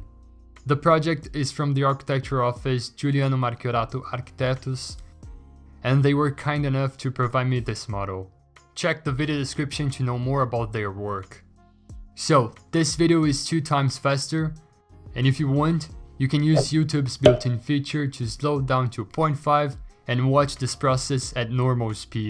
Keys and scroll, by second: 1.1 Return, 1.5 Escape, 4.1 scroll, 7.1-8.3 ctrl+alt+g, 8.2 scroll, 16.7 b, 19.5 x.